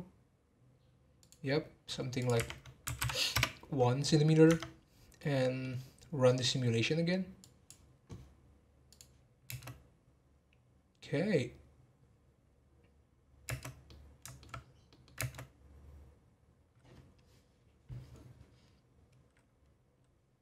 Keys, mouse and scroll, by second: 2.2-4.5 drag, 4.5 Tab, 4.9 scroll down 3, 5.2-7.4 middle drag, 7.4-9.0 drag, 9.5 space, 13.7 space, 13.8-14.5 middle drag, 14.5-14.9 scroll down 3, 14.9 middle click, 15.2 space.